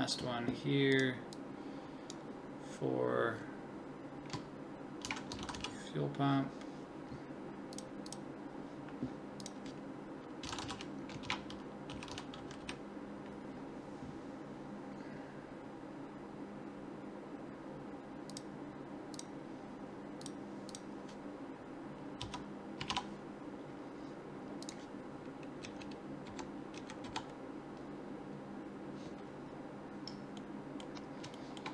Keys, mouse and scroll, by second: 25.6 Right, 26.3 Left, 26.8 Right, 27.0 Left.